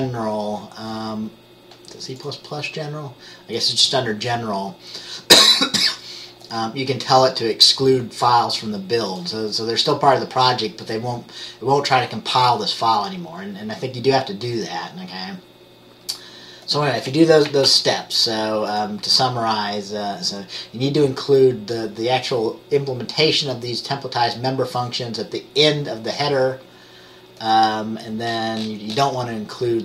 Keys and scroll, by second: 17.8 ctrl+s.